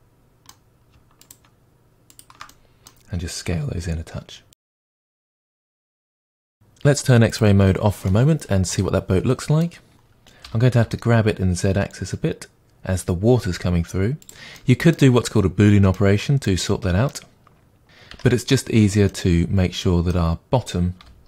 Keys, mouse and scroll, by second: 1.2 shift+click, 2.1 shift+click, 2.5-4.6 middle drag, 3.5 s, 4.6 click, 4.7-5.9 middle drag, 5.4 scroll down 2, 5.9 Tab, 6.1 scroll down 2, 7.3 click, 8.1-14.3 middle drag, 10.4 g, 14.3-14.6 drag, 14.6-21.2 middle drag, 15.2-15.6 scroll up 1, 18.1 Tab, 21.0 g.